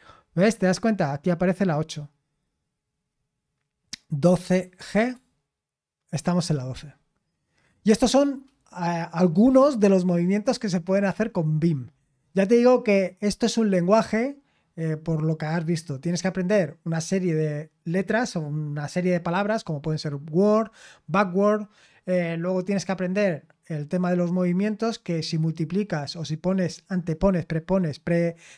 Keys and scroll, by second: 4.0-5.3 typing.